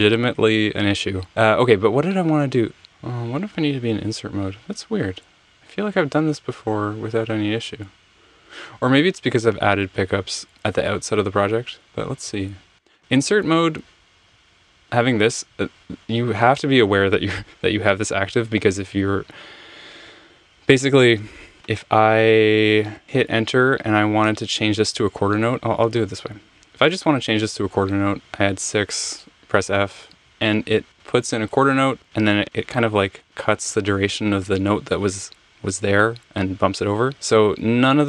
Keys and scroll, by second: 2.8 super+z, 2.8 5, 4.8 Return, 6.6 Right, 22.8 Return, 28.2 6, 29.0 f, 30.8 Escape.